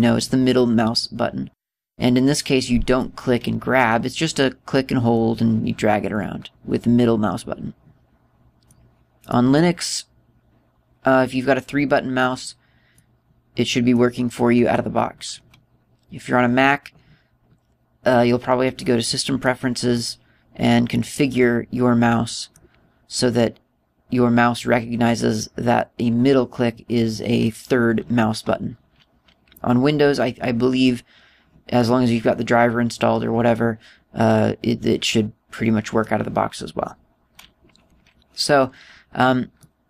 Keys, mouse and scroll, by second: 3.4 middle click, 4.8 middle click, 9.8 middle click, 13.4 middle click, 19.9 middle click, 21.4 middle click, 32.3 middle click.